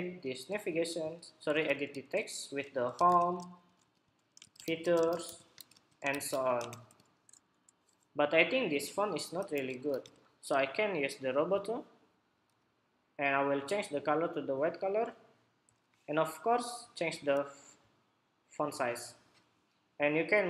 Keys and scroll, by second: 1.2 super+a, 7.2 Escape, 8.1 Escape.